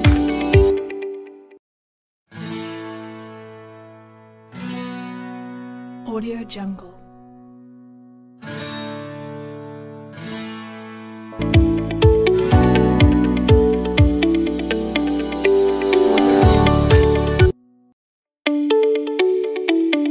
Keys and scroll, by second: 4.9 typing, 11.0 s, 17.1 s.